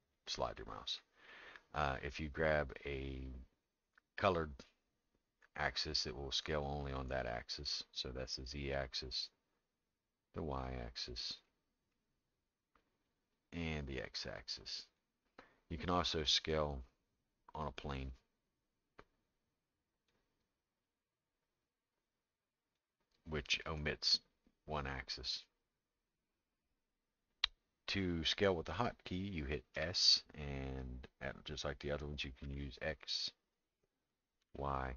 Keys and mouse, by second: 4.8-8.8 drag, 9.9-11.0 drag, 11.4 middle click, 13.4-15.0 drag, 16.8-20.1 drag, 20.9-22.8 drag, 29.7 s.